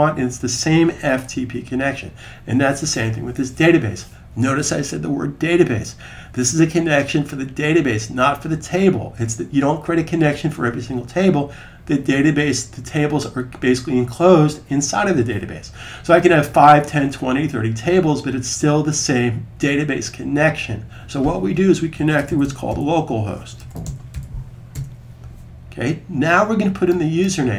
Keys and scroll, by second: 21.8-23.9 typing.